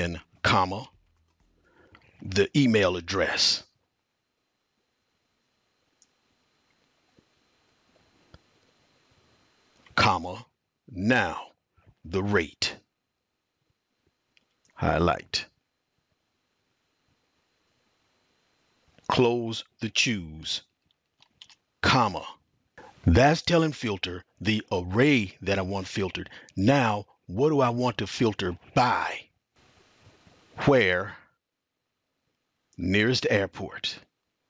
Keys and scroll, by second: 1.1 typing, 5.7-10.3 typing, 14.4-19.3 typing, 21.7 typing, 30.7 typing, 32.5-34.4 typing.